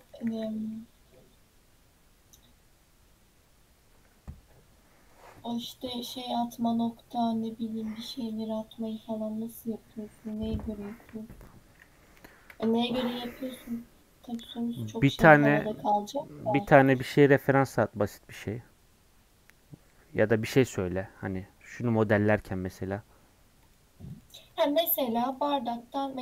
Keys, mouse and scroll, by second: 0.0 click, 0.3 x, 0.7 middle click, 1.1 scroll up 1, 1.6-4.5 scroll down 5, 12.3-20.5 shift+middle drag, 23.6-26.2 drag.